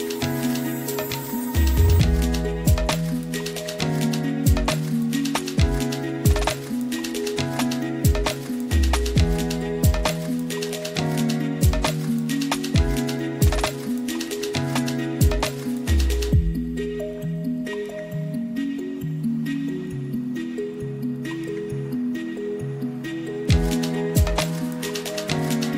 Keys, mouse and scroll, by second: 0.7 middle click, 1.7 middle click, 2.3 KP_0, 3.2 ctrl+s, 3.7 click, 4.8 click, 7.6-8.2 drag, 9.6-10.0 drag, 10.3 middle click, 11.0 shift+a, 16.3 BackSpace, 16.4 BackSpace, 19.6 click, 22.0 ctrl+t, 22.5 click, 24.3 click, 25.3 click.